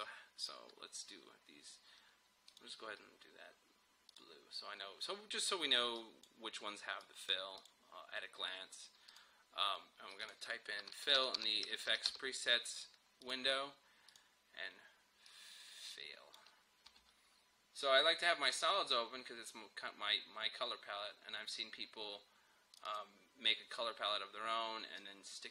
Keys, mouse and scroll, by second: 11.0-12.2 typing, 13.2-18.5 drag, 22.8-25.5 drag.